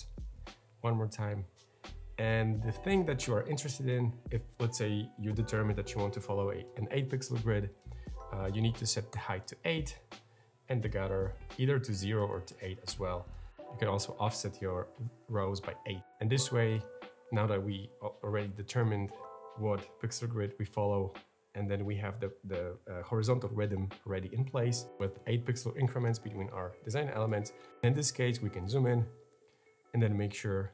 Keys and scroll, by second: 8.3 8, 8.9 Return, 10.6-12.1 typing, 12.3 Return.